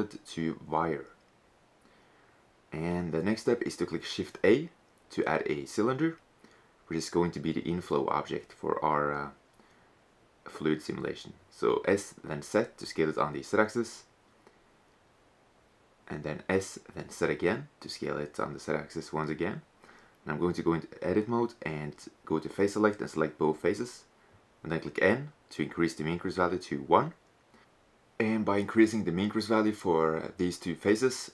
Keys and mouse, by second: 4.7 shift+a, 9.4 s, 15.3 s, 19.6-21.0 drag, 19.6 typing, 21.1-22.5 drag, 21.8 right click, 22.5 click, 22.5 right click, 23.0 click, 23.0-24.9 right drag, 23.9 n, 25.3-27.2 drag, 28.4 Tab, 29.6 n, 31.0-31.3 drag.